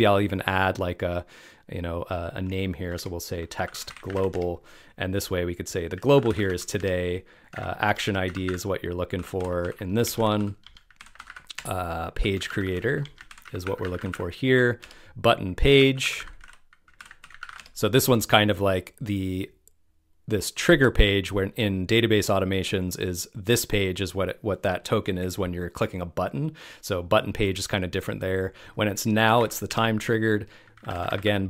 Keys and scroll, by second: 7.8 BackSpace, 13.0 BackSpace.